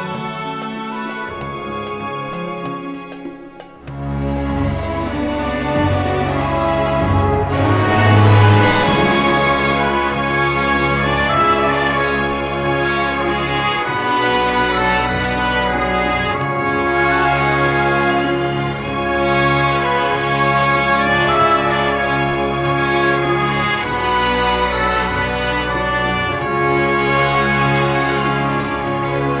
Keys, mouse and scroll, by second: 0.4 click, 1.3-6.7 drag, 6.9-8.3 drag, 8.6 click, 9.0 1, 10.0 scroll up 2, 11.5 2, 13.3 3, 14.7 4, 16.2 5, 17.5 6, 18.7 0, 19.8 scroll down 2, 20.4 scroll up 2, 20.9-23.5 drag, 24.5-25.2 drag, 25.3 click, 26.2 click.